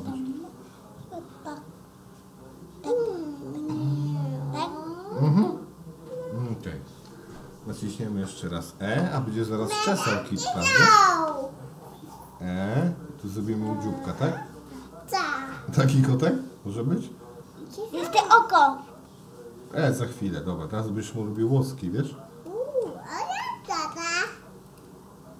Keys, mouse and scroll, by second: 8.9 e, 11.7 e, 13.6 s, 15.9-18.6 middle drag, 19.8 Tab, 21.4-21.8 shift+middle drag, 22.5-22.9 middle drag, 24.2 click, 24.7 click.